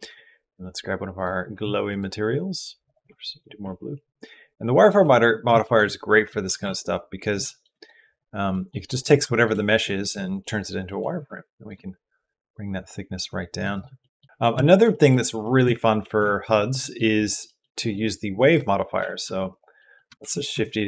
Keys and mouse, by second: 1.7-2.9 drag, 4.6 click, 5.5 shift+middle click, 5.9 middle click, 6.3 g, 7.3 shift+middle click, 8.3 middle click, 9.1 shift+middle click, 11.8 shift+middle click, 11.9-13.4 shift+drag, 13.8 middle click, 14.4 shift+click, 14.8 click, 15.2 shift+click, 16.1 shift+click, 16.5 middle click, 17.0 click, 17.3 middle click, 17.4 click, 19.0 g, 19.6 click, 20.2 shift+d.